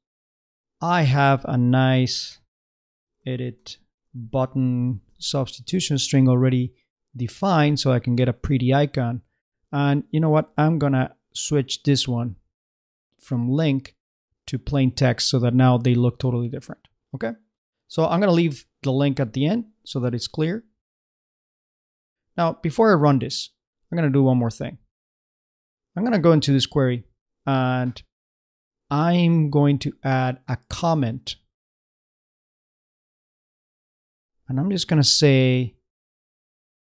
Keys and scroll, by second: 2.3-5.1 typing, 36.0 shift+/, 36.6 shift+8.